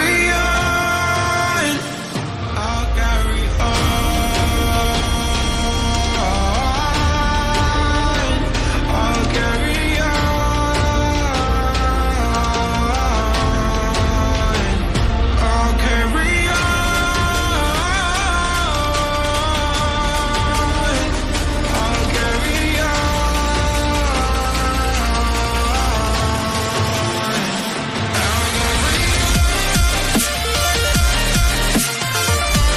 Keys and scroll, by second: 8.1 ctrl+a, 10.9 ctrl+a, 11.7 ctrl+d, 12.8 ctrl+d, 12.8 Down, 13.5 Right.